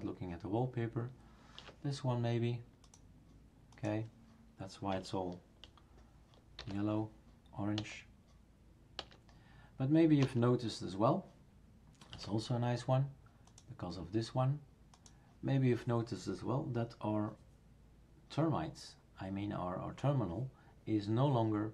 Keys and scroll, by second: 6.6 alt+shift+n, 7.7 alt+shift+n, 8.9 alt+shift+n, 10.2 alt+shift+n.